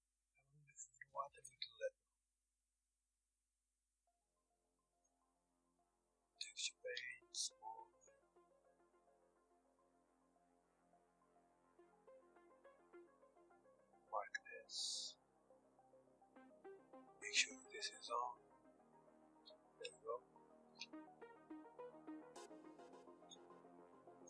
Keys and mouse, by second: 3.5 click, 7.6 f, 7.6-12.5 drag, 12.3 Tab, 12.8 Tab, 14.1-15.9 drag, 19.3 Tab, 20.2 Tab, 22.2-23.3 drag, 23.3-24.2 middle drag.